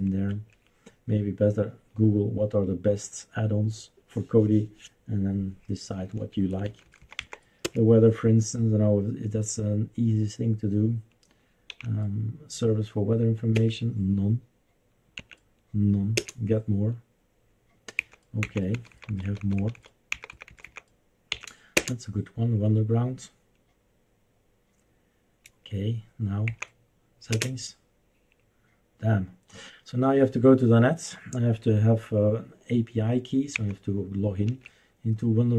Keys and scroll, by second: 0.3 Escape, 6.7 Down, 6.8 Down, 7.0 Down, 7.2 Down, 7.6 Return, 11.8 Left, 13.5 Return, 15.2 Right, 16.1 Return, 18.0 Down, 18.4 Down, 18.7 Down, 18.9 Down, 19.1 Down, 19.2 Down, 19.4 Down, 19.6 Down, 19.7 Down, 20.1 Down, 20.3 Down, 20.5 Down, 20.7 Down, 21.3 Up, 21.8 Return, 26.5 Down, 27.3 Return, 33.5 Down, 34.4 Up.